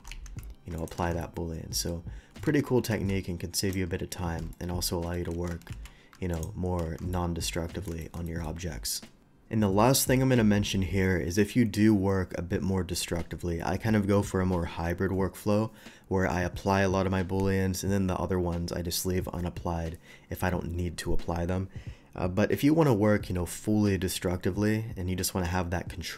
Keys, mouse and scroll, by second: 0.0 g, 0.1 x, 0.8 click, 1.2-1.9 shift+middle drag, 2.9 ctrl+z, 2.9 alt+x, 3.6 click, 4.5 shift+middle click, 5.7 ctrl+alt+z, 5.7 alt+x, 6.3 click, 6.9 shift+2, 7.1-7.9 middle drag, 8.0 shift+middle drag, 8.3 shift+middle click.